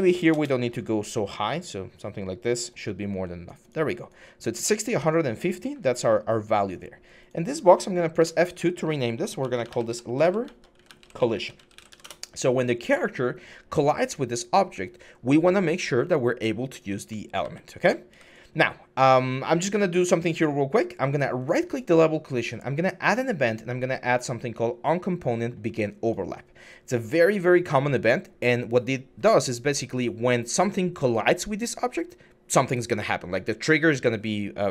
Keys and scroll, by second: 0.0-0.3 typing, 2.9 typing, 5.1-6.1 typing, 8.0 F2, 9.2-12.0 typing, 17.2-17.9 typing.